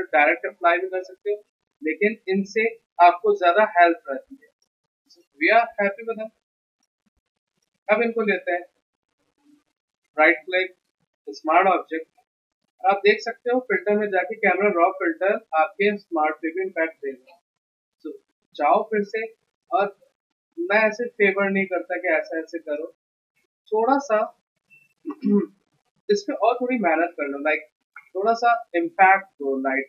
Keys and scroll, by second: 23.3 z.